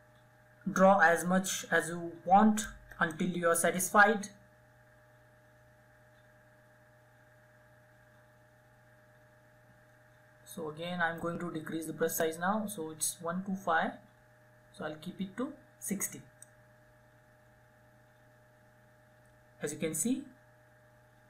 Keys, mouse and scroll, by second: 13.0-14.0 typing, 15.9-21.2 drag.